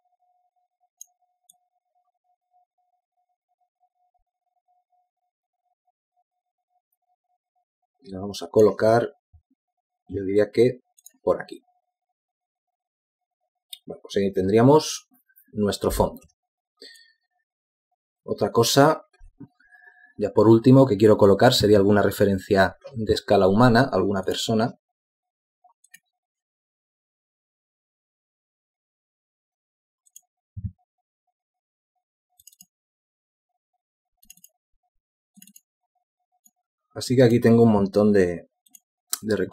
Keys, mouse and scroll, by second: 2.4 shift+click, 17.2 z.